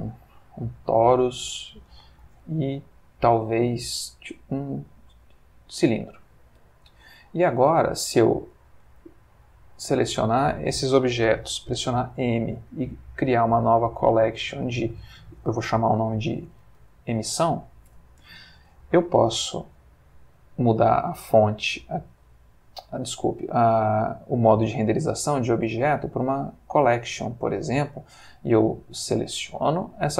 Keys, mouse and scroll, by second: 0.1 click, 0.9 g, 1.6 click, 2.2 shift+a, 5.8 click, 6.6 g, 7.5 click, 8.5 click, 9.0 shift+click, 11.8 m, 13.2 Return, 14.9 shift+e, 16.3-17.2 typing, 17.4 Return, 19.1 click, 22.2 middle click, 23.2 middle click, 25.2 click, 26.3 click, 28.4 click, 29.4 click.